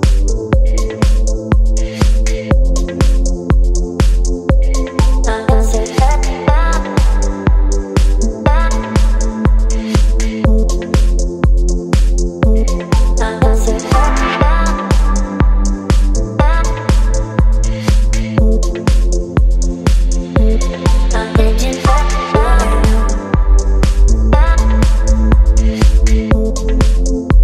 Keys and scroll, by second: 4.2 Return, 4.6 space, 8.0 ctrl+t, 14.2 Return, 14.6 Down, 14.7 Down, 14.9 Down, 15.9 space, 16.7 ctrl+m.